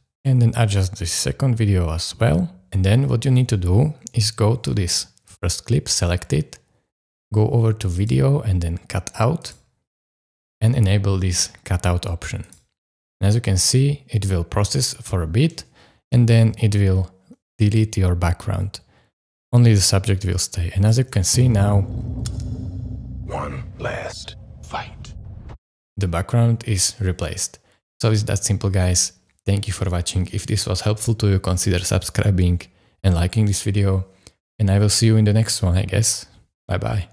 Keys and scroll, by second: 21.1 space, 25.4 space.